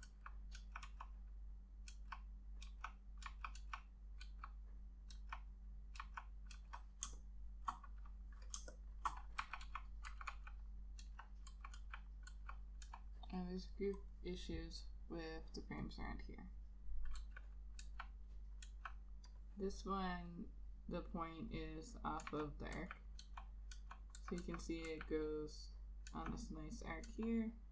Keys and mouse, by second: 0.7 ], 1.0 ], 2.0-7.2 typing, 8.7-10.4 typing, 11.6 [, 11.9 [, 12.4 [, 14.2 ], 17.3 [, 18.0 ], 18.8 ], 22.3 ], 23.3 ], 24.3 [, 24.5 [, 25.0 [, 26.2 ], 27.2 ].